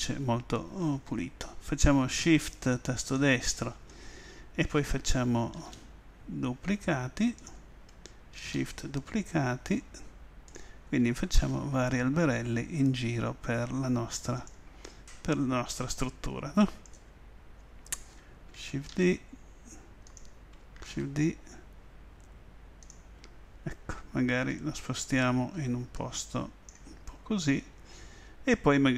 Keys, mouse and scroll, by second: 5.6 shift+d, 7.4 click, 8.4 shift+d, 10.6 click, 11.4 shift+d, 14.4 click, 14.9-16.7 middle drag, 15.4 click, 15.8 click, 16.0 click, 16.7 click, 17.2-18.9 middle drag, 18.9 shift+d, 20.2 click, 21.0 shift+d, 27.1-28.9 middle drag, 27.8 click.